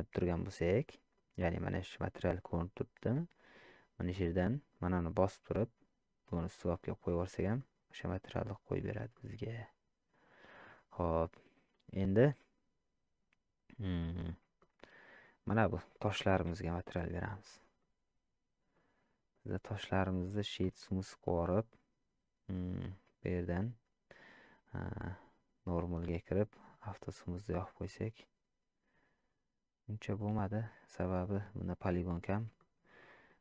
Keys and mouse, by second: 0.8 middle drag, 2.5-3.2 middle drag, 4.9-6.9 drag, 7.6-8.8 middle drag, 9.1 shift+middle drag, 10.6-11.0 middle drag, 11.7 shift+middle drag, 14.6 shift+middle click, 15.4 click, 17.8-18.7 middle drag, 19.3 click, 21.3 middle click, 25.7 click, 27.0 click, 27.8-30.4 middle drag, 31.1-31.9 middle drag, 32.6 shift+middle drag, 33.0 middle click.